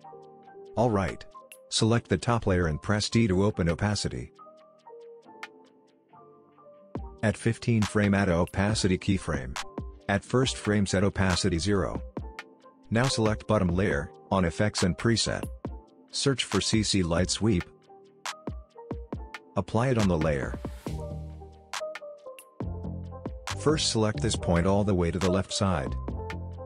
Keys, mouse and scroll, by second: 3.1 t, 4.4-7.5 drag, 16.5-18.5 typing, 19.5-21.4 drag, 25.0-26.6 drag.